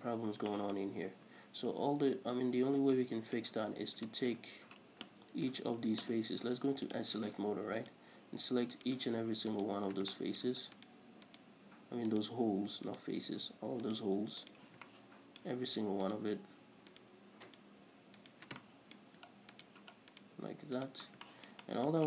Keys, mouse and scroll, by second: 0.6 scroll down 2, 1.5 Tab, 1.7-5.8 middle drag, 1.7-3.0 scroll up 2, 3.0-3.3 scroll up 1, 4.8-5.8 scroll down 2, 5.8 alt+right click, 7.2 click, 8.1 alt+shift+right click, 9.1 alt+shift+right click, 9.9 alt+shift+right click, 10.5 shift+middle click, 11.1 alt+shift+right click, 11.2 middle click, 11.6 alt+shift+right click, 12.4 alt+shift+right click, 13.2 alt+shift+right click, 14.2 alt+shift+right click, 14.8 alt+shift+right click, 15.2-16.4 shift+middle drag, 16.4 alt+shift+right click, 17.2 alt+shift+right click, 17.8 alt+shift+right click, 18.5 alt+shift+right click, 18.9-19.9 shift+middle drag, 19.9 alt+shift+right click, 20.5 right click, 21.1 alt+shift+right click, 21.4-22.0 shift+middle drag, 21.4 scroll down 2.